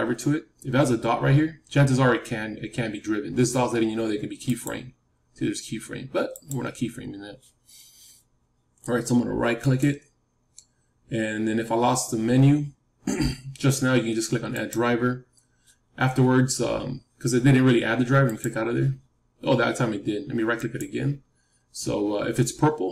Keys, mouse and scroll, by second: 4.4-8.3 drag, 9.5-12.8 right drag, 20.5-22.9 right drag.